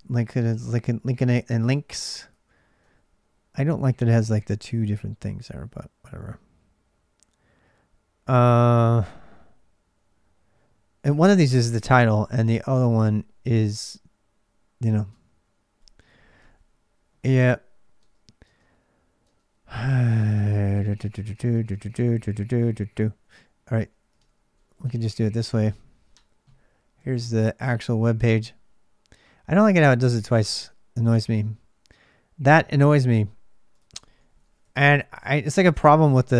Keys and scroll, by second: 1.8-2.6 typing, 23.9-25.0 typing, 34.8-36.3 typing.